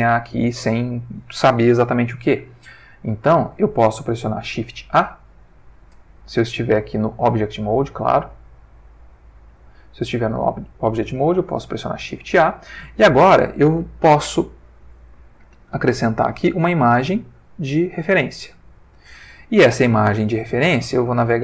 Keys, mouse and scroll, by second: 4.7 shift+a, 6.5 click, 9.4 click, 11.8 shift+a, 18.1 click, 21.0 click.